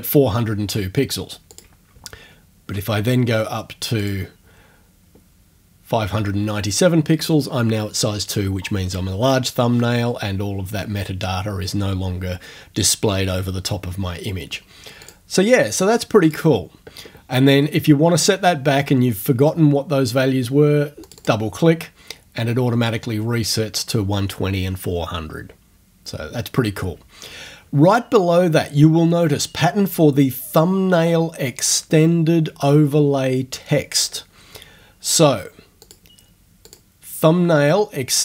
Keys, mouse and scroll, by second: 1.5 click, 2.2 ctrl+scroll up 2, 4.0 click, 15.0 click, 16.3 click, 21.0 click, 35.8 click, 36.7 click.